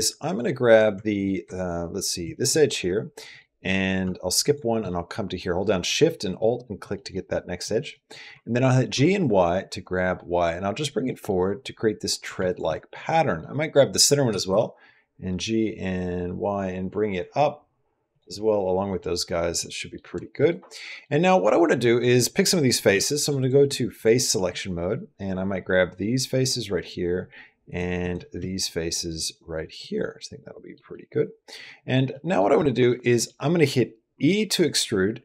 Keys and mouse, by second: 0.8-1.5 typing, 1.0 alt+click, 2.1 alt+click, 2.4 middle click, 3.0 typing, 4.2 alt+shift+click, 4.8 middle click, 6.7 middle click, 7.1 middle click, 7.8 middle click, 8.7 g, 10.9 middle click, 12.1-12.9 typing, 12.3 alt+click, 12.8 middle click, 13.5 middle click, 14.1 g, 18.2 middle click, 19.0 middle click, 19.5 middle click, 20.2 middle click, 20.4 middle click, 20.7 click, 22.7-23.8 typing, 27.5 shift+click, 29.6 middle click, 30.8-31.8 middle drag, 31.9 middle click, 32.5 middle click, 33.0 middle click, 34.1 e.